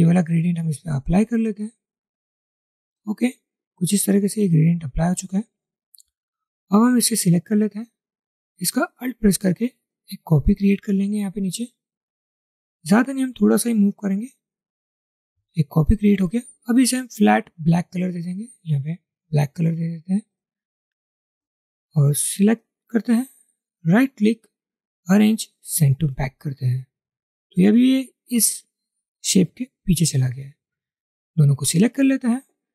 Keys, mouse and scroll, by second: 8.7 alt+click, 10.0 alt+click, 24.0 right click.